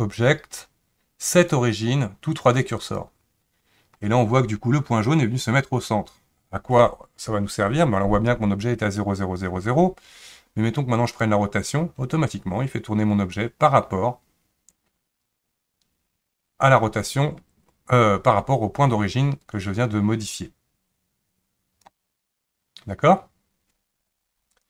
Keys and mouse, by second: 11.2-21.8 drag.